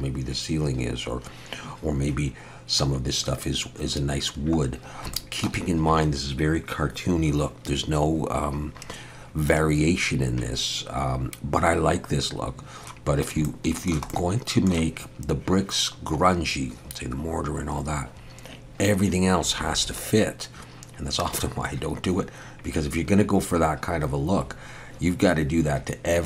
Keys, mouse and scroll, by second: 4.8 scroll down 1, 5.1 shift+middle click, 12.5 scroll up 1, 13.4 shift+middle click, 14.1 middle click.